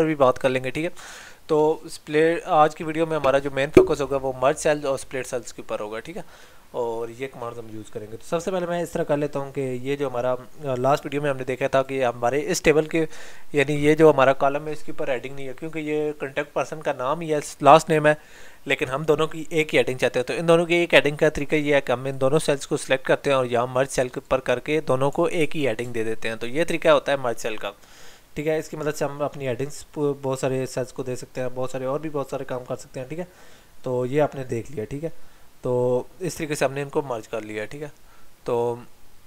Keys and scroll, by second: 25.4 ctrl+z, 26.7 ctrl+y.